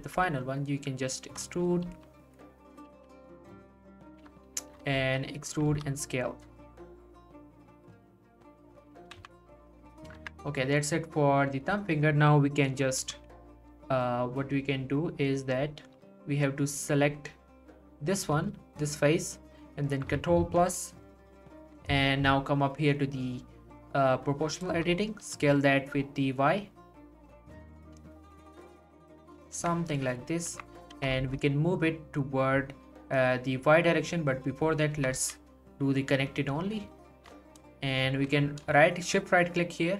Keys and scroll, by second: 0.0 g, 1.8 g, 5.0 w, 5.7 s, 9.2 z, 10.2 Tab, 13.0 s, 16.0 Tab, 20.6 ctrl+KP_Add, 24.7 s, 25.2 y, 29.6 Tab, 30.9 g, 31.2 y, 34.9 g, 35.1 y.